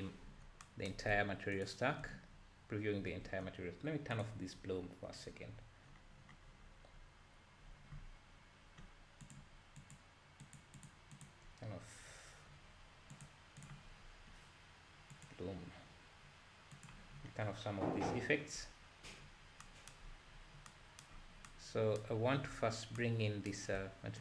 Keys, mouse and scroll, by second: 1.7 ctrl+shift+click, 2.3-2.8 scroll down 1, 2.8 scroll down 1, 3.0-3.7 scroll up 1, 3.7-4.1 scroll up 1, 9.8 click, 13.7-14.1 drag, 14.1-14.8 scroll down 1, 14.8-15.1 scroll down 1, 15.1 click, 16.8 click, 17.2-17.9 scroll down 4, 18.6 scroll up 2.